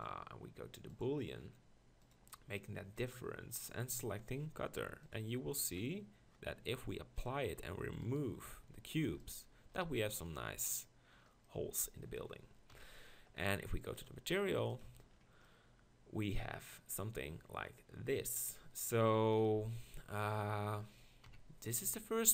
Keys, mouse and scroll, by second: 3.1-5.7 drag, 7.2 click, 9.1 x, 9.8-10.2 drag, 12.7 KP_1, 14.0 click, 21.2 KP_1.